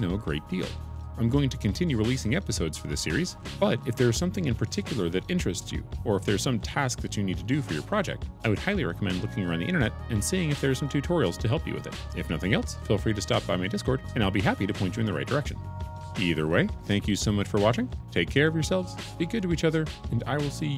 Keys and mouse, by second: 0.3 3, 0.8 g, 1.4 F12, 2.9 click, 3.3 shift+click, 4.0 Tab, 4.4 F12, 6.2 ctrl+z, 8.7 ctrl+KP_Add, 9.2 ctrl+KP_Subtract, 9.7 F12, 11.3 ctrl+KP_Add, 13.1 ctrl+KP_Subtract, 13.7 F12, 15.3 3, 20.0 F12.